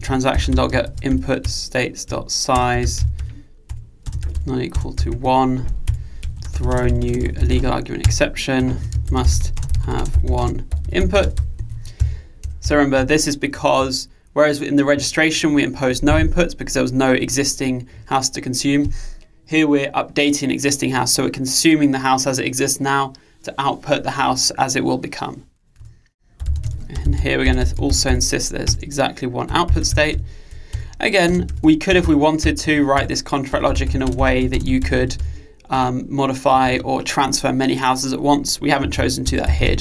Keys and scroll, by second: 1.5 Return, 8.1 Return, 28.7 Return, 35.8 Return.